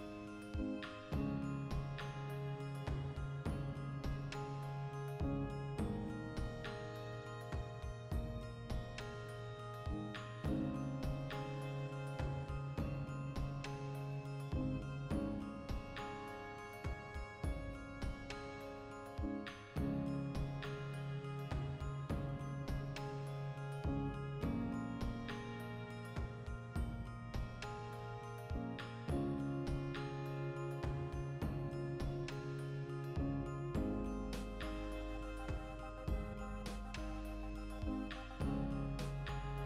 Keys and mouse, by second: 1.1 alt+right click, 1.6 g, 2.4 click, 2.5-4.6 middle drag, 3.5 ctrl+z, 4.6 alt+right click, 5.0 ctrl+x, 5.3-6.3 alt+right drag, 6.3 alt+q, 7.1-8.4 ctrl+shift+middle drag, 7.9 g, 8.4 click, 8.5-14.1 middle drag, 14.1 alt+right click, 14.3-15.6 middle drag, 15.0 s, 15.6 click, 16.2 g, 16.7 ctrl+click, 16.8 middle click, 17.2 alt+right click, 17.4-19.1 shift+middle drag, 18.5 s, 19.1 click, 19.2 g, 19.8 ctrl+click, 19.9 middle click, 20.1 alt+shift+right click, 20.9 ctrl+x, 21.1-23.1 shift+middle drag, 23.1 alt+right click, 23.3 middle click, 23.5 s, 24.2 click, 24.3 middle click, 24.4 g, 24.9 ctrl+click, 25.1 shift+middle click, 25.5 alt+right click, 25.7 middle click, 26.2 alt+shift+right click, 26.6 ctrl+x, 26.7-30.8 middle drag, 29.5 Tab, 29.8 ctrl+2, 30.8 click, 31.8 middle click, 32.3-34.1 drag, 34.1 Tab, 34.4-35.5 shift+middle drag, 35.5 click, 35.8 middle click, 36.2-37.2 alt+right drag, 37.2 ctrl+b.